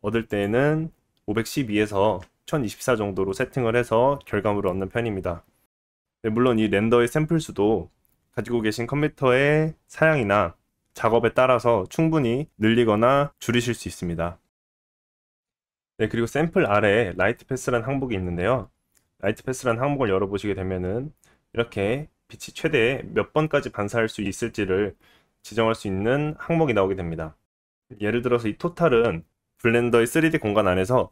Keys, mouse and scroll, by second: 20.6-22.2 scroll down 1.